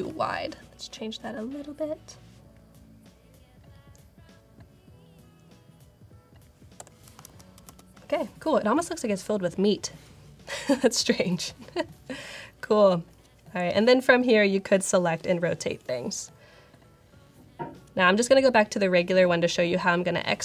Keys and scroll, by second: 6.7 Return, 7.2 super+0, 7.6 super+0.